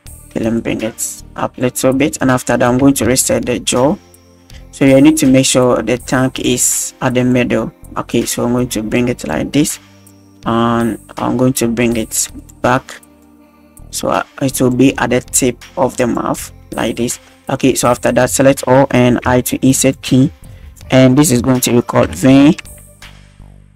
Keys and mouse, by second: 0.5 click, 2.2 click, 2.6 click, 3.1 alt+g, 4.5 drag, 5.6 click, 6.4-7.2 drag, 7.2 right drag, 8.1 click, 10.1 click, 11.9-12.5 right drag, 13.2 click, 15.3-16.6 drag, 17.7 drag, 18.1 a, 19.3 i, 19.9-21.2 drag.